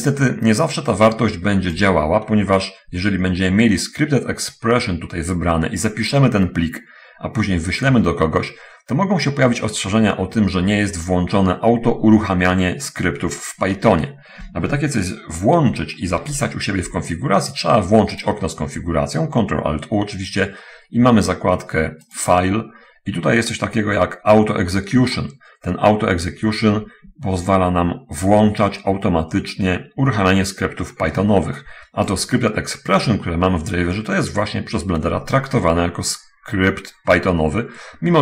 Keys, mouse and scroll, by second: 16.0 ctrl+alt+u, 17.6-18.8 alt+drag, 22.1 click, 25.2-27.4 ctrl+middle drag, 32.0-32.6 alt+drag.